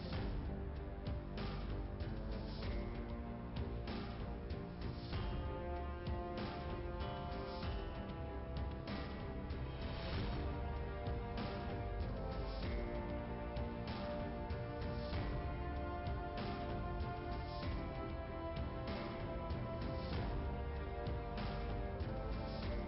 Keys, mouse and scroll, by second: 1.7 click, 3.9 click, 4.6 click, 7.7 click, 8.8 ., 8.9 click, 9.0 ., 9.1 8, 11.3 9, 11.5 Return, 14.4 click, 16.2 click, 17.8 click, 18.0 click, 21.0 click, 21.7 click.